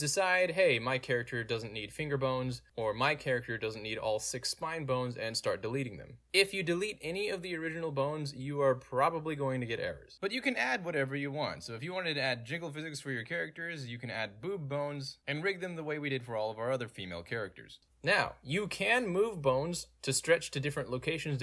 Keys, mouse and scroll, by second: 0.5 shift+click, 0.8 shift+click, 1.0 shift+click, 1.3 shift+click, 2.1 click, 2.4 middle click, 2.8 click, 3.6 shift+click, 4.0 right click, 5.2 click, 6.2 Escape, 7.7-10.4 middle drag, 7.7-8.4 scroll down 2, 8.4 scroll down 1, 8.5-10.4 scroll up 2, 11.0-11.7 middle drag, 11.7 alt+right click, 11.7-12.5 alt+drag, 12.7-13.0 alt+right drag, 13.1 alt+click, 13.6-15.0 drag, 15.2 ctrl+z, 18.3 click, 18.4 End, 18.7 click, 19.6-21.4 drag.